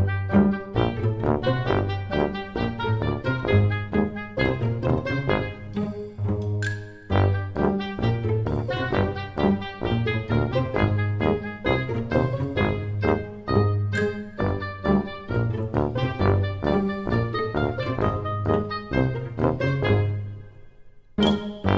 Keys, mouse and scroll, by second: 5.9 click, 6.7-7.2 scroll up 2, 7.2 middle click, 7.2 scroll up 1, 7.6 middle click, 7.6-8.0 scroll down 4, 8.0 Tab, 9.9 s.